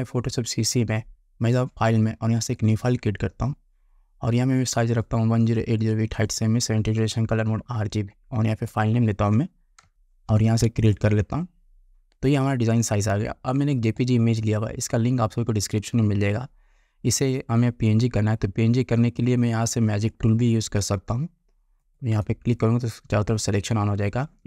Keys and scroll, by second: 9.9 d.